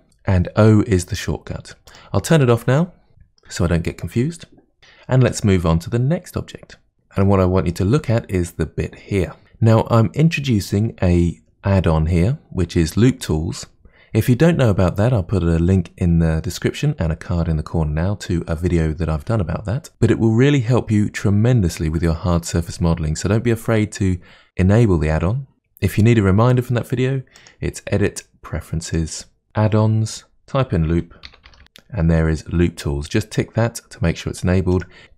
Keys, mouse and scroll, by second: 1.9 click, 7.3-9.4 middle drag, 27.4-29.5 drag, 35.0 Tab.